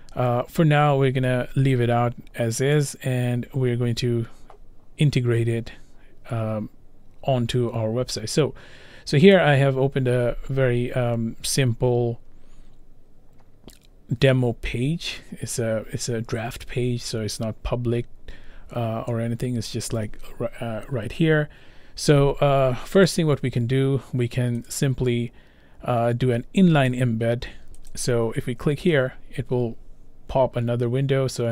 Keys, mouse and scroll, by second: 2.9 click, 9.4 click, 14.4-16.0 scroll, 17.0 scroll, 18.0-21.0 scroll, 23.3 click, 24.7 click, 27.9 click.